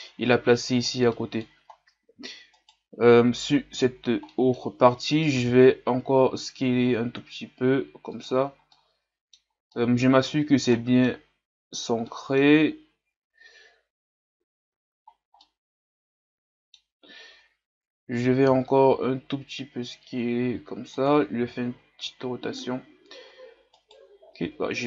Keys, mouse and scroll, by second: 2.6-3.8 right drag, 3.8 l, 4.0-5.3 scroll down 2, 5.3 scroll down 1, 5.4 s, 8.7-10.2 middle drag, 10.2-10.7 scroll up 3, 10.7 middle click, 11.1-12.0 scroll up 3, 12.1-14.3 middle drag, 14.3-15.4 scroll down 6, 14.8 Tab, 15.4-17.0 middle drag, 17.0-17.3 scroll up 1, 17.3 Tab, 18.4 s, 21.4 r, 24.5 Tab.